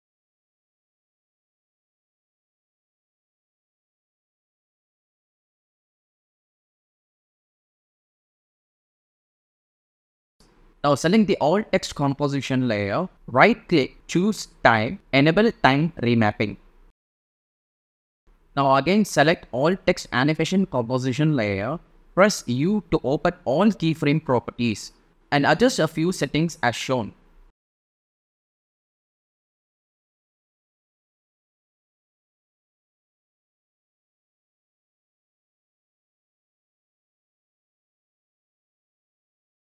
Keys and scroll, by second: 0.2 super+v, 1.3 space, 3.7 space, 19.3 super+a, 22.9 shift+u.